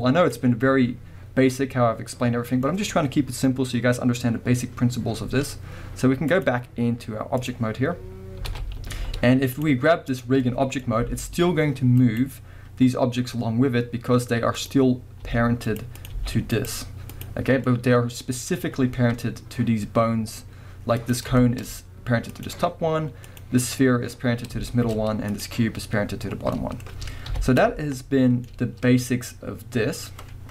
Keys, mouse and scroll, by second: 0.0-1.5 drag, 1.5-6.3 middle drag, 6.3-10.2 drag, 8.5 alt+a, 8.9 z, 10.4-12.2 middle drag, 11.0 g, 12.2 right click, 14.6 click, 15.3 g, 15.8 right click, 15.9 click, 16.1 g, 16.7 right click, 17.1 click, 17.7-21.0 middle drag, 18.1-20.5 scroll up 2, 20.5-21.0 scroll up 1, 21.0 click, 21.4-22.3 shift+middle drag, 21.6-22.3 scroll up 2, 22.3 click, 23.3 click, 24.6-25.3 shift+middle drag, 25.0-25.3 scroll up 2, 25.3 click, 26.3 scroll down 2, 26.6-30.5 middle drag, 27.3 KP_1, 28.5-30.2 scroll up 2, 30.2-30.5 scroll up 1.